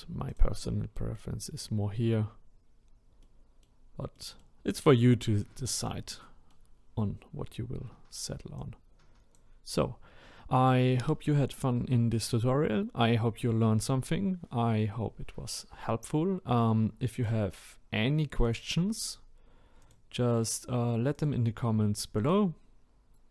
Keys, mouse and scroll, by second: 0.4 click, 0.9-2.8 middle drag, 2.8-3.2 scroll down 1, 3.2-8.7 middle drag, 8.7-20.6 drag.